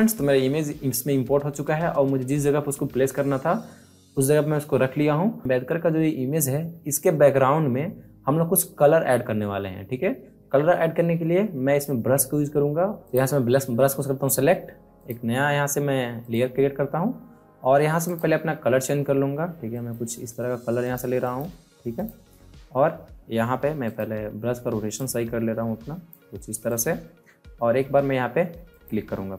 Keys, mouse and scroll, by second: 12.9 click, 23.8 right click, 23.8 right click, 24.9-26.6 drag.